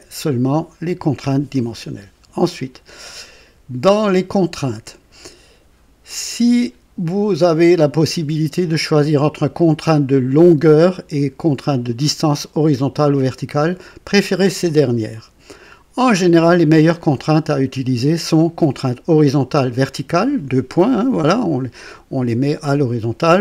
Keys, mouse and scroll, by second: 2.6-3.0 scroll down 2.